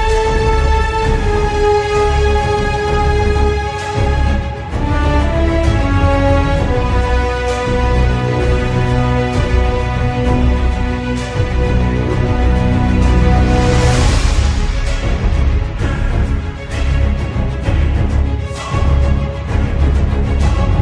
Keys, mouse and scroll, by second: 0.4 scroll up 5, 0.6 shift+middle click, 1.3 middle click, 2.2 shift+middle click, 2.5 middle click.